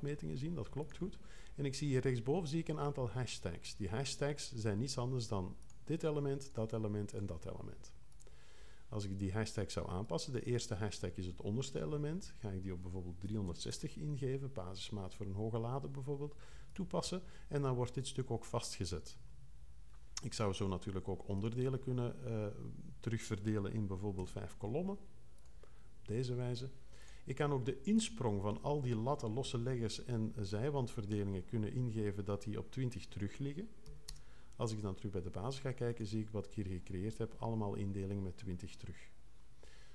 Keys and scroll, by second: 13.0-14.2 typing, 24.1 5, 33.8 2, 34.1 0.